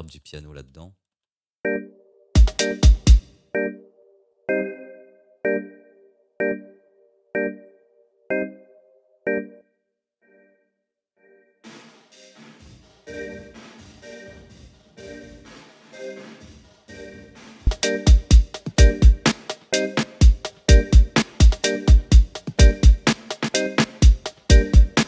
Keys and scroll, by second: 1.1 space.